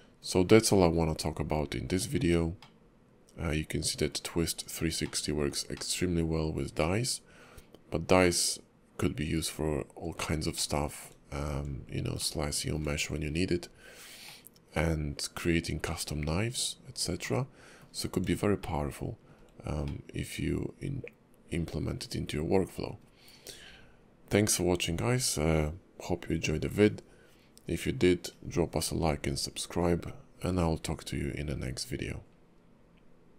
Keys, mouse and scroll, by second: 2.6 middle click, 4.4 scroll up 3, 5.0 shift+middle click, 5.7 middle click, 10.5 shift+middle click, 11.3-11.8 scroll up 2, 12.2 shift+middle click, 13.4-14.2 scroll down 3, 14.2 middle click, 16.8 scroll up 2, 17.2 middle click, 18.1 scroll up 2, 18.6 shift+middle click, 19.9 middle click, 23.2 scroll down 2.